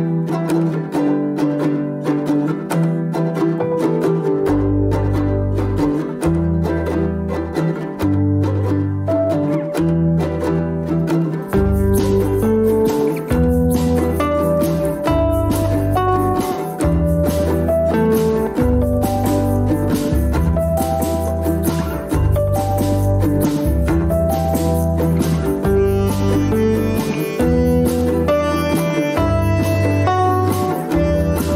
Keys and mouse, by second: 0.0-0.7 middle drag, 1.3-1.7 middle drag, 2.9 click, 4.7 Tab, 5.6 shift+middle click, 8.3 shift+middle click, 12.1 ctrl+r, 18.6 middle click, 20.7 ctrl+r, 23.2 shift+middle click, 24.6 ctrl+r, 28.6 shift+middle click, 30.1 shift+middle click.